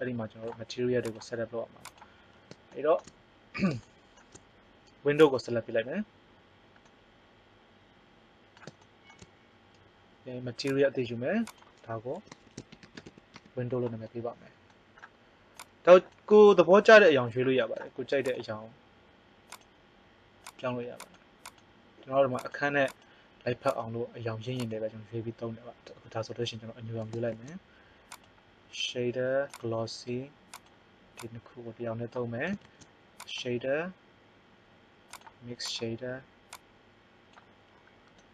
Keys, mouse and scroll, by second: 5.1 right click, 7.3-8.5 middle drag, 10.6 click, 19.3 click, 27.3 shift+a, 32.5 shift+a, 36.5-37.7 drag.